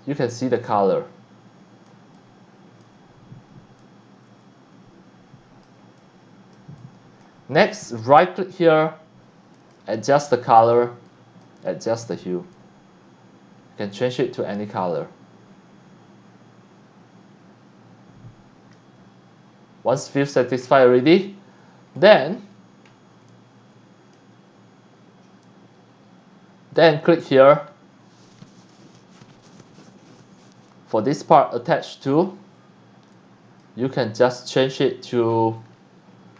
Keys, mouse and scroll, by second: 0.2 scroll down 1, 0.5 c, 0.6-1.8 drag, 2.1-2.8 drag, 2.9 s, 3.8-5.6 drag, 5.8 x, 6.0-6.5 drag, 6.8 click, 7.8 right click, 9.6 click, 11.1 click, 12.5-18.7 drag, 20.2 click, 20.6-21.0 scroll down 2, 21.1 x, 21.2 click, 22.3 scroll up 1, 22.9 scroll up 1, 23.2 x, 23.3 click, 23.7 c, 25.4 click, 26.8 click, 33.1 click, 35.1-35.7 scroll down 2, 35.8-36.3 scroll up 1.